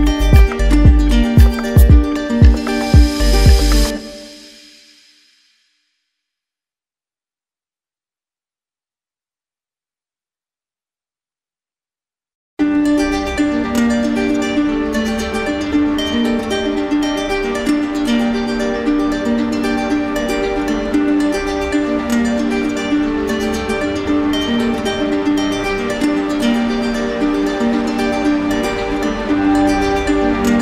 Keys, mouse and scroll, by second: 0.0 click, 0.1 click, 0.1 click, 0.1 right click, 0.4 alt+right click, 0.5 right click, 0.6 click, 0.7 click, 0.9 shift+click, 0.9 shift+click, 1.0 click, 1.0 right click, 1.2 shift+click, 1.3 click, 1.4 click, 1.5 shift+click, 1.6 right click, 1.7 alt+right click, 1.8 click, 1.8 right click, 1.9 click, 2.0 shift+click, 2.3 click, 2.3 right click, 2.4 click, 2.4 right click, 2.5 ctrl+z, 2.5 right click, 2.6 shift+click, 2.6 shift+right click, 2.6 shift+click, 2.8 click, 2.9 shift+click, 3.0 shift+click, 3.0 right click, 3.0 click, 3.1 click, 3.1 right click, 3.2 click, 3.5 click, 3.5 right click, 3.6 shift+click, 3.7 shift+click, 3.7 right click, 3.8 click, 3.8 right click, 3.9 click, 4.0 click, 4.0 right click, 4.1 click, 4.3 right click, 4.4 shift+click, 4.7 click, 4.7 right click, 4.7 click, 4.8 click, 4.9 right click, 4.9 shift+click, 5.1 right click, 5.3 click, 5.7 click, 5.8 right click, 6.2 click, 6.2 right click, 6.2 shift+click, 6.5 click, 6.5 right click, 6.5 shift+click, 6.6 click, 6.6 click, 6.7 click, 6.7 alt+right click, 6.8 right click, 6.8 click, 6.9 alt+right click, 7.0 click, 7.4 alt+right click, 7.4 click, 7.9 ctrl+w, 7.9 click, 8.0 ctrl+z, 8.1 click, 8.7 shift+click, 8.8 click, 8.9 click, 9.3 click, 9.3 right click, 9.3 alt+right click, 9.5 right click, 9.5-10.0 click, 9.6 click, 9.8 right click, 9.8 click, 10.0 click, 10.0 right click, 10.1 click, 10.9 alt+right click, 11.9 click, 12.1 shift+click, 12.2 shift+click, 12.2 click, 12.6 click, 12.7 click, 12.7 right click, 12.7 click, 12.9 click, 12.9 right click, 13.2 shift+click, 13.2 right click, 13.3 alt+right click, 13.3 shift+click, 13.4 right click, 13.4 click, 13.6 shift+click, 13.8 shift+click, 13.9 shift+click, 13.9 alt+right click, 14.0 alt+right click, 14.0 right click, 14.3 right click, 14.3 alt+click, 14.3 alt+click, 14.4 alt+click, 14.5 click, 14.8 alt+click, 14.9 alt+right click, 15.0 click, 15.3 shift+click, 15.5 click, 15.7 click, 15.8 click, 15.8 alt+right click, 15.9 alt+right click, 16.5 alt+right click, 17.4 right click, 18.0 shift+right click, 18.8 alt+right click, 19.6 right click, 20.3 alt+right click.